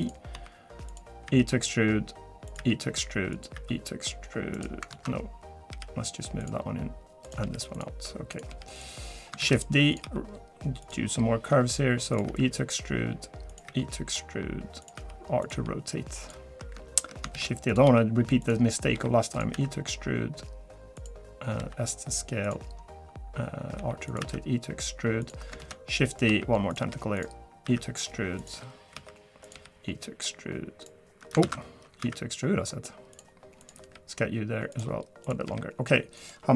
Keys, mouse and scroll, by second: 0.0-1.3 typing, 2.6 e, 4.9 ctrl+z, 5.7 g, 7.2 click, 7.4 g, 8.3 click, 8.5 g, 9.4 shift+d, 10.0 r, 11.5 g, 12.3 e, 13.7 e, 15.0 r, 15.5 g, 17.3 shift+d, 17.8 r, 18.9 g, 19.5 e, 21.6 s, 23.8 r, 24.2 e, 25.6 shift+d, 26.3 r, 26.8 g, 27.6 e, 28.9 r, 29.5 g, 31.4 ctrl+z, 32.0 e, 33.6 click, 33.8 g, 35.2 click, 35.4 g.